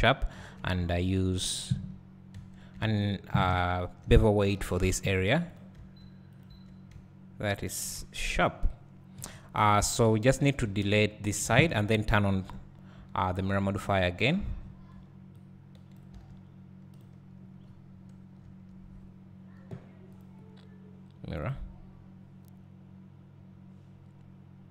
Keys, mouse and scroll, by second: 1.1 alt+click, 2.5 2, 3.0 alt+shift+click, 5.7 ctrl+e, 6.4 click, 6.6 Tab, 8.1 Tab, 9.2 KP_1, 10.1 1, 11.5 alt+a, 11.8-12.7 scroll down 2, 12.7-13.0 scroll down 1, 14.2 b, 14.5 scroll down 2, 15.9 b, 17.0 x, 17.6 scroll up 3, 18.5 Tab, 21.6-24.7 drag.